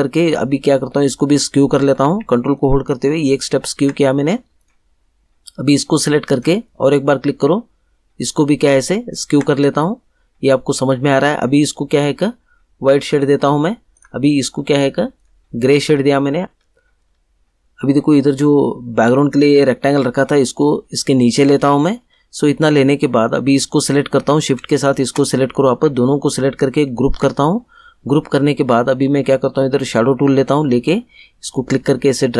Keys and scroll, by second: 27.0 ctrl+g.